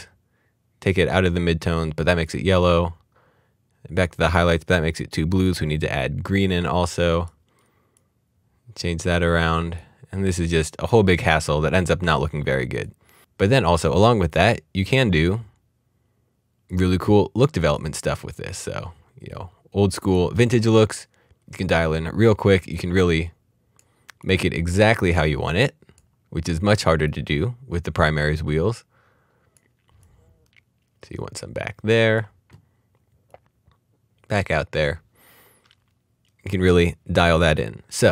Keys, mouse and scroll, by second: 2.0 click, 12.7 right click, 14.3 click, 16.7 click, 22.7 click.